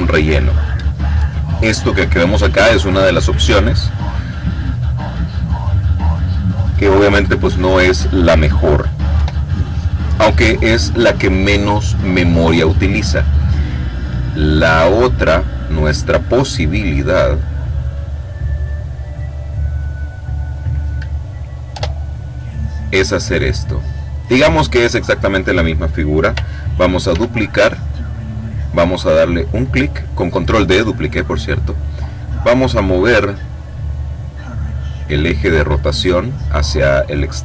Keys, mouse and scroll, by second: 8.8 Delete, 13.3 click, 16.0 click, 17.8-18.8 drag, 18.9 click, 20.2 click, 21.4 Return, 23.5 click, 26.8 ctrl+d, 29.0 click, 33.3-35.9 drag.